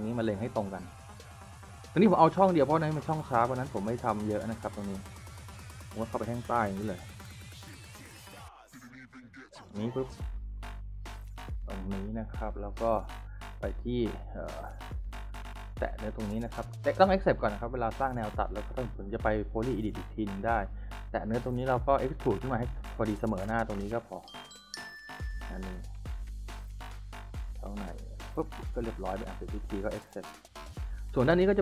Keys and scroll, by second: 5.3-8.3 typing, 12.2 s, 16.6 s, 28.6 s, 30.7 Escape.